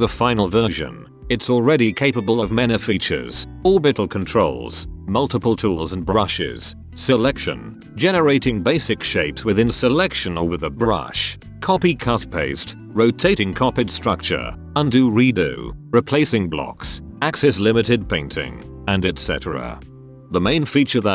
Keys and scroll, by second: 8.8 ctrl+c, 9.1 r, 12.7 ctrl+1, 14.7 ctrl+z, 14.9 ctrl+z, 15.1 ctrl+z, 15.2 ctrl+z, 15.4 ctrl+z, 15.5 ctrl+z, 15.8 ctrl+z, 16.0 ctrl+z, 16.7-17.9 typing, 20.6 3.